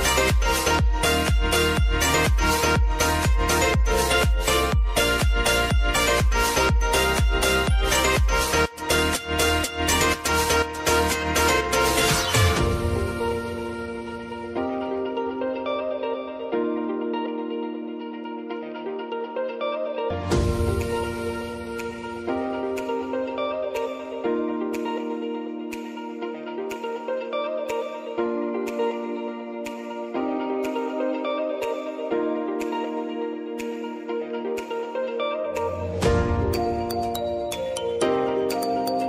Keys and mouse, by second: 0.1 click, 0.5 space, 2.6-4.6 shift+drag, 4.6 space, 7.3 space, 8.1-10.6 drag, 11.1 space, 12.3 click, 13.2 space, 14.2 click, 14.6 space, 19.2 click, 20.2 ctrl+d, 20.7 [, 21.2 space, 23.5 click, 24.0 space, 26.4 click, 26.7 space, 27.7 click, 28.0 ctrl+d, 28.4 [, 28.9 space, 30.6 click, 31.9 [, 33.3 click, 34.4 space, 37.0-39.0 drag.